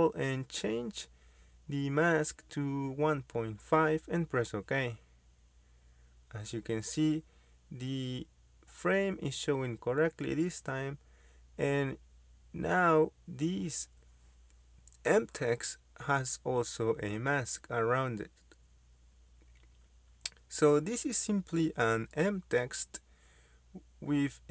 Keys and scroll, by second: 3.6-5.0 typing, 16.9 m, 17.1 space.